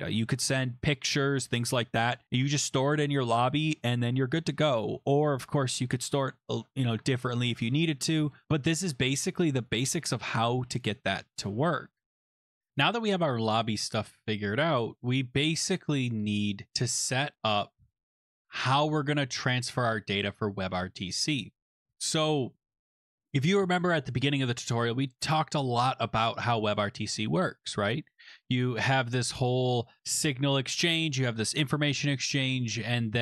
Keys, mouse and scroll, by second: 8.6 click, 9.7 click, 10.8 click, 11.9 click, 12.4 click, 12.7 click, 15.5 click, 17.7 click, 21.8 scroll.